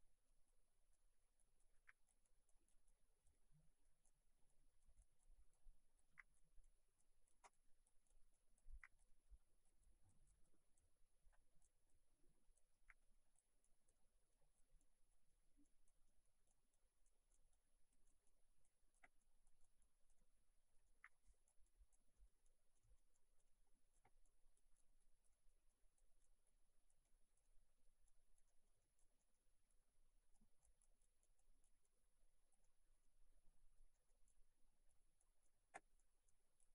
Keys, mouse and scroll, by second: 0.0 middle click, 0.5 click, 1.0 middle click, 1.5 click, 1.8 middle click, 2.1 click, 3.4 middle click, 4.5 click, 6.1 middle click, 6.4 click, 8.7 middle click, 9.0 click, 9.1 middle click, 9.9 click, 10.9 middle click, 12.0 click, 12.7 middle click, 13.0 middle click, 13.7 click, 14.0 middle click, 14.8 click, 15.3 middle click, 15.7 click, 16.1 middle click, 16.8 click, 20.2 middle click, 21.1 middle click, 21.7 click, 22.2 middle click, 22.5 click, 22.9 middle click, 23.2 click, 23.5 middle click, 24.3 click, 25.4 middle click, 26.0 click, 27.5 middle click, 28.1 click, 28.5 middle click, 29.7 click, 32.7 middle click, 34.1 middle click, 35.0 click.